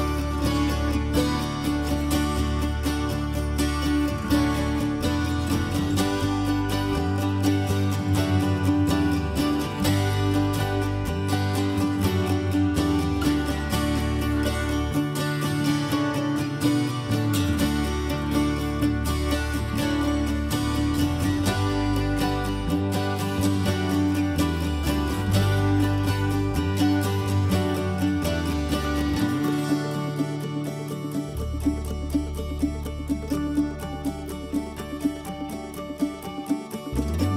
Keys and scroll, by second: 8.0 h, 14.6 ctrl+h, 15.2 ctrl+h, 16.2 ctrl+h, 19.1 ctrl+h, 24.9-25.9 typing.